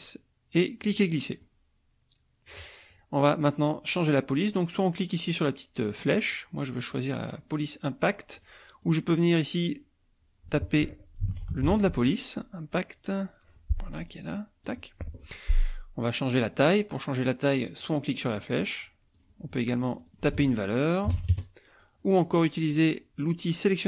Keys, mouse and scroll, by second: 0.0-2.7 drag, 5.1 click, 8.4 click, 8.9 click, 11.0-12.2 typing, 14.7 click, 17.8 click, 19.1 click, 20.1 ctrl+click, 20.4 ctrl+a, 21.1 KP_5, 21.3 KP_Enter.